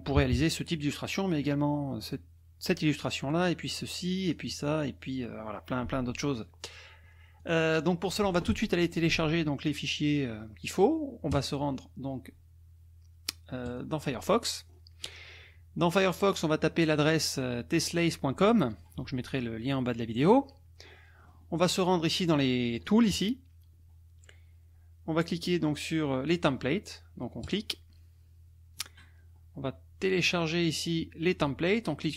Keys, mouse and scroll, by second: 0.2 KP_Subtract, 1.0 click, 1.1 middle click, 2.0 click, 3.3 click, 4.2 click, 7.4 click, 11.3 click, 13.7 click, 14.7-15.3 scroll up 2, 16.5 click, 18.7 click, 20.8-22.7 scroll up 4, 22.7 click, 27.4 click, 28.7-32.0 scroll down 2.